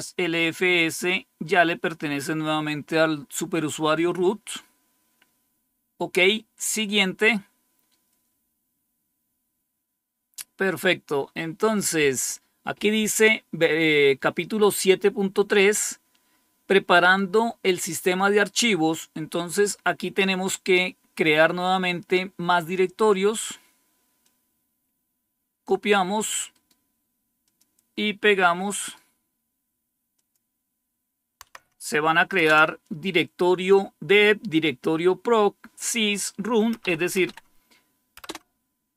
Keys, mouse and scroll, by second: 3.5-4.2 scroll down 1, 4.2-5.9 scroll down 1, 6.5 click, 24.1-26.1 drag, 26.4 right click, 27.3 click, 28.1 click, 28.6 right click, 30.0 click, 31.3 Right, 32.3 Return, 36.7 Up, 37.1 Up, 38.1 Return.